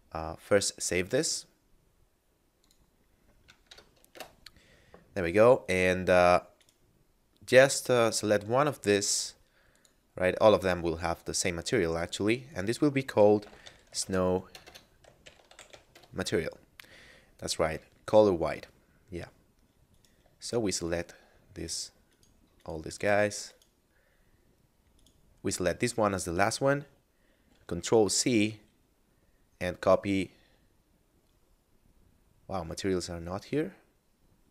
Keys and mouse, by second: 0.6 click, 2.5 click, 3.7 KP_Add, 6.6 right click, 9.8 click, 12.0 click, 13.2-15.8 typing, 15.9 Return, 19.8 right click, 20.8 shift+right click, 21.6 shift+right click, 22.1 shift+right click, 22.6 shift+right click, 23.5 shift+right click, 24.8 shift+right click, 27.4 ctrl+c.